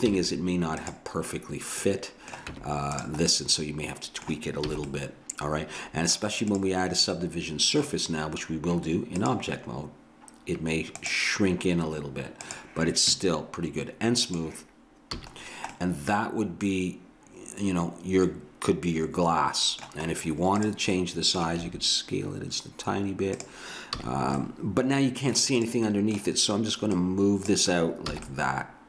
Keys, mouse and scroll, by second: 0.1 z, 2.5 Tab, 4.7 a, 6.5-8.4 right drag, 9.2-11.0 drag, 12.5-14.2 drag, 14.4-16.0 drag, 15.1 a, 16.0-17.6 middle drag, 20.1 middle click, 20.6-21.7 drag, 21.6 s, 23.9 a, 25.6-28.1 right drag, 28.1 a, 28.4 right click, 28.7-28.8 middle drag.